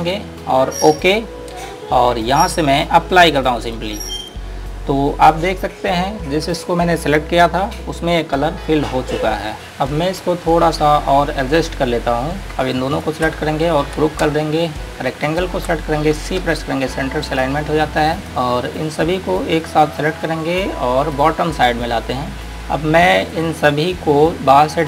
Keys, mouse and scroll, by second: 3.8 click, 8.2 scroll up 1, 9.6 click, 10.2 scroll down 1, 11.5-11.9 scroll up 1, 12.4-12.8 scroll down 1, 13.2 click, 15.5 click, 17.4 click, 18.1 scroll down 1, 18.5 click, 19.0 scroll down 1, 19.9 click, 22.1 scroll up 1, 22.6-23.1 scroll down 1, 23.6 click.